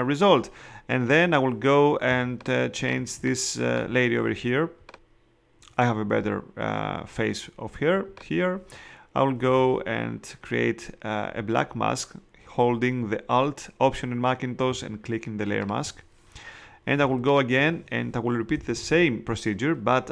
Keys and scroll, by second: 2.0 space, 17.0 space, 18.5 [.